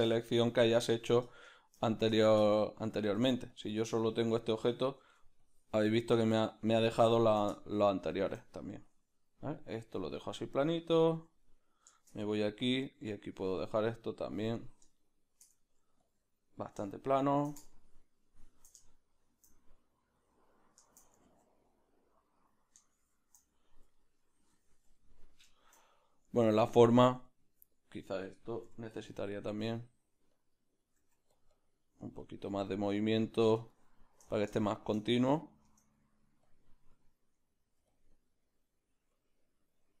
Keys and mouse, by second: 1.3 shift+middle click, 1.8 middle click, 2.2 shift+middle click, 2.6 ctrl+middle click, 3.5 middle click, 3.5 f, 4.2-12.7 drag, 5.0 ctrl+z, 7.5-8.7 shift+middle drag, 9.7 middle click, 11.0 ctrl+middle click, 11.4 middle click, 12.7 middle click, 13.3 click, 14.9-16.0 shift+middle drag, 16.0-19.9 drag, 16.9 shift+middle click, 18.8 shift+middle click, 20.4 click, 21.3 ctrl+z, 21.6 click, 21.7 click, 22.9 shift+click, 23.5 click, 23.6-26.3 ctrl+middle drag, 26.3-29.3 drag, 26.9 middle click, 27.2 ctrl+middle click, 27.7 middle click, 29.3-30.8 middle drag, 29.3 f, 30.3 click, 30.8-40.0 drag, 31.3 f, 34.3-35.4 middle drag, 35.9 middle click, 37.9 f.